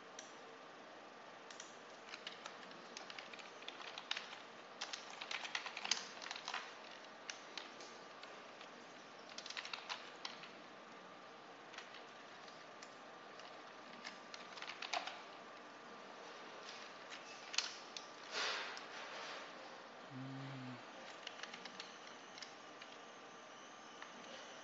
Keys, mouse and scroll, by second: 1.4 click, 2.3 Right, 2.9-6.7 typing, 6.8 shift+Left, 8.4-10.3 typing, 12.1 Left, 13.4 Right, 14.3-15.3 typing, 15.4 Left, 16.4 Left, 17.2 Delete, 20.1 Left, 21.2 Delete, 21.7 Right, 22.7 1, 24.5 Left.